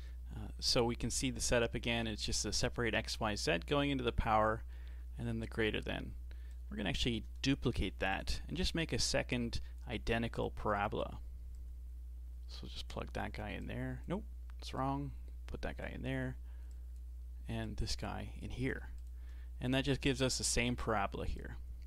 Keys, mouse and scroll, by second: 1.1-1.9 scroll up 1, 1.9-4.9 shift+middle drag, 6.5 drag, 7.7 shift+d, 8.9 click, 9.3-10.5 drag, 11.6 click, 13.6 click, 14.8 click, 16.7 click, 17.6 click, 19.0 ctrl+shift+click, 21.4 click.